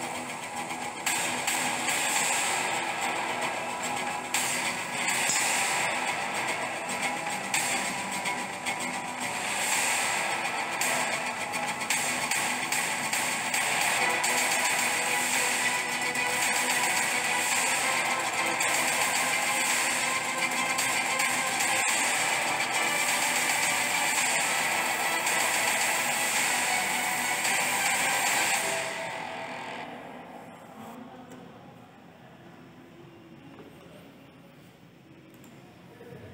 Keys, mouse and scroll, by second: 31.0 space, 35.2 click.